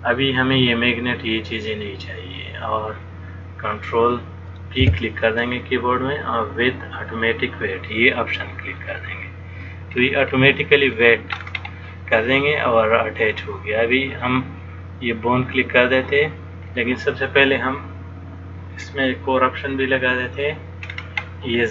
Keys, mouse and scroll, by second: 0.6 click, 5.0 ctrl+p, 10.1-11.1 scroll down 1, 11.1 click, 11.1 scroll down 4, 11.5-12.4 scroll up 5, 13.6 click, 19.2 middle click, 21.1-21.7 scroll up 2.